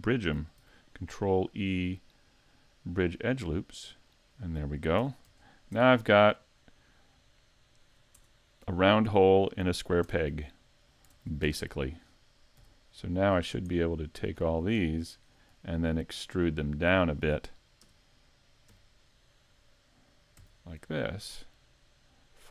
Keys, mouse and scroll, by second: 0.6 ctrl+e, 4.0 ctrl+e, 4.7 scroll down 1, 5.0 a, 5.3 Tab, 5.8 Tab, 6.2 middle click, 8.2 Tab, 8.7-9.1 scroll down 2, 9.2 middle click, 10.1 Tab, 10.3 scroll up 4, 11.1 ctrl+Tab, 12.6 c, 14.5 right click, 14.8 middle click, 15.3-15.7 scroll up 4, 15.7 shift+middle click, 16.7 middle click, 17.8 KP_Decimal, 18.7 KP_5, 19.1 scroll down 4, 20.4 e.